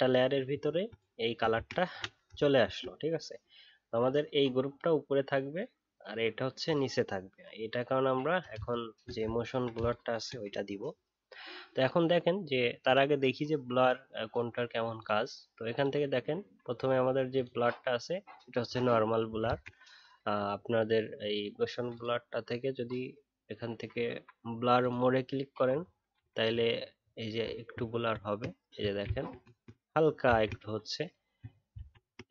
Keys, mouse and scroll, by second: 0.5-1.5 alt+scroll up 1, 1.5 ctrl+z, 2.3 alt+scroll down 1, 7.4-7.8 alt+scroll up 1, 7.8 alt+scroll down 1, 9.3-12.5 alt+scroll down 2, 19.4 ctrl+z, 25.7-26.4 alt+scroll up 1, 27.9 ctrl+z, 31.7 ctrl+z.